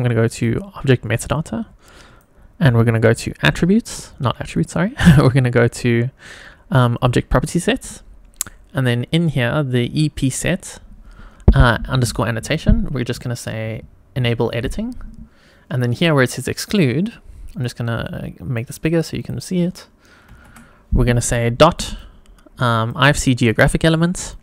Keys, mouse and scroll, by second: 0.3 click, 1.3-2.3 drag, 2.9 click, 4.5 click, 6.9 click, 7.5-9.9 scroll down 1, 14.5-15.1 drag, 15.3-16.3 scroll down 2, 16.3-17.6 drag, 18.0 click, 19.1-24.4 drag.